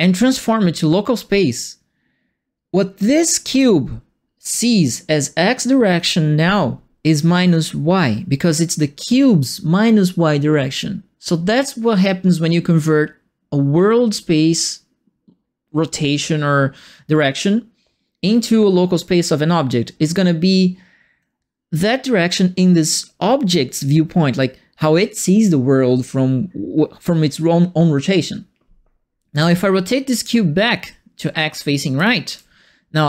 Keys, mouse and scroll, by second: 3.4 click, 29.3 click, 29.4 e, 30.1-31.8 drag, 31.9 e, 32.2 w.